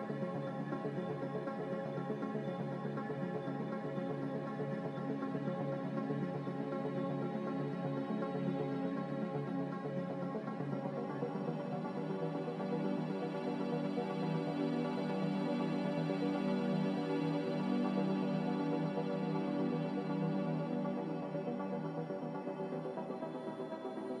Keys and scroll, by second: 1.2 b, 3.5 Delete, 4.9 ctrl+z, 9.1 Delete, 22.0 a, 23.1 x.